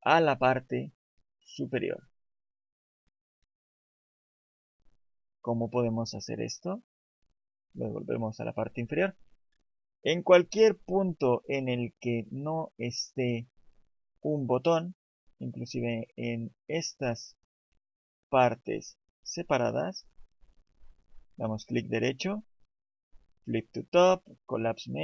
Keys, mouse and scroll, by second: 2.0 right click, 6.3 right click, 21.3 right click.